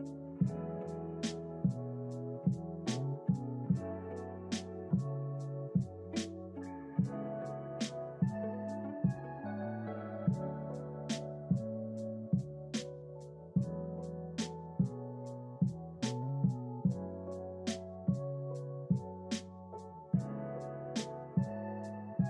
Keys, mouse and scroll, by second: 4.1-5.7 drag, 16.7 click, 18.3 click.